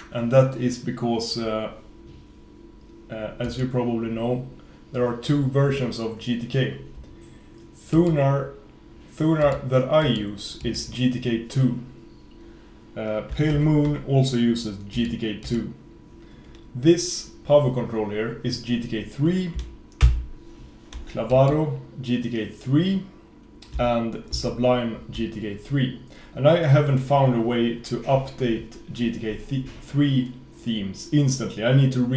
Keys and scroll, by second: 13.6 super+f, 20.1 super+v, 24.4 super+s.